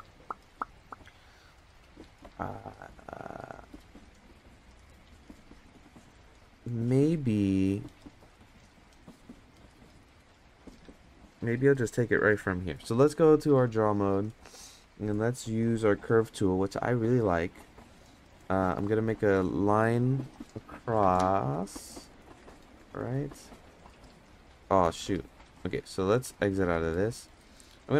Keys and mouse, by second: 2.6 middle click, 5.7-6.2 middle drag, 9.5 middle click, 10.6 middle drag, 13.3-13.9 drag, 16.0 click, 22.6-26.5 drag, 27.1 middle click, 27.4 shift+middle click.